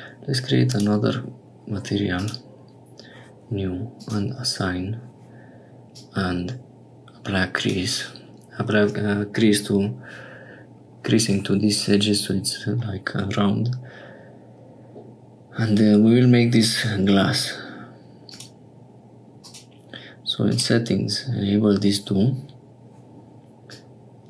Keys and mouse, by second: 0.6 click, 2.1 click, 4.0 click, 5.9-7.6 drag, 18.2 click, 19.4 click, 20.8 click, 23.6-24.2 drag.